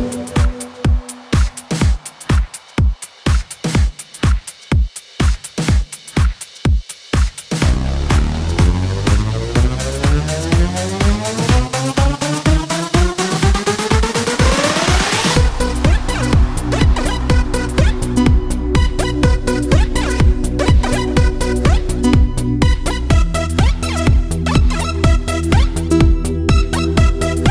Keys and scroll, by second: 0.5 ctrl+c, 0.9 ctrl+v, 8.1 ctrl+c, 8.5 ctrl+v.